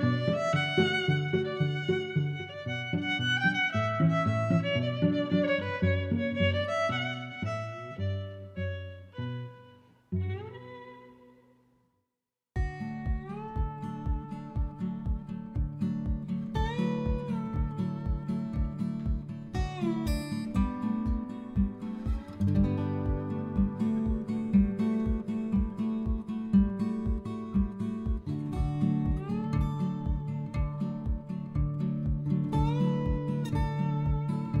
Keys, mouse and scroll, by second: 0.0 Tab, 0.0 i, 0.6 click, 1.1 3, 1.2 0, 1.5 Return, 2.3 click, 3.0 click, 4.1 click, 6.9 click, 9.6 click, 12.9 click, 13.5 click, 14.2 shift+super+Tab, 14.7 a, 15.5 click, 18.0 click, 18.4 middle click, 19.4 s, 21.4 click, 22.4 Tab, 23.3 click, 23.6 middle click, 25.8 middle click, 27.1 super+z, 28.2 middle click, 28.9 click, 29.3 g, 30.5 click, 32.6 middle click, 33.8 g, 33.9 y.